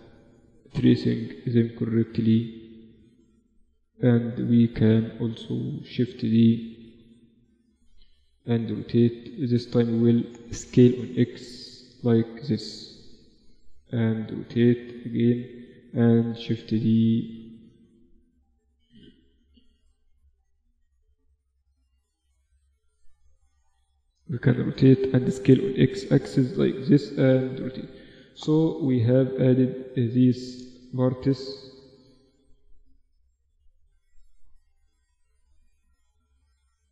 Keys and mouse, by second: 0.4 g, 1.8 a, 2.3 Tab, 5.1-7.9 drag, 6.4 shift+d, 7.9 r, 10.1 s, 12.5 r, 14.3 g, 15.6 shift+d, 16.9 Tab, 17.9 a, 18.8 b, 20.1 g, 21.5 a, 21.7 a, 23.3 r, 24.7 s, 26.7 r, 27.3 Tab, 27.7 z, 30.4-32.9 middle drag, 31.9 shift+d, 33.3 r, 35.3 z, 35.5 r.